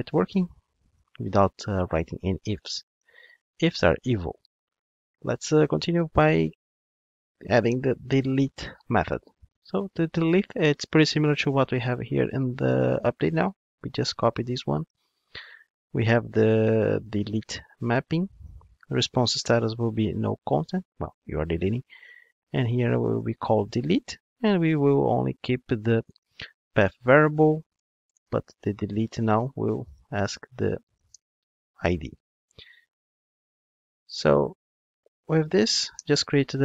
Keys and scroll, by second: 35.9 alt+Return.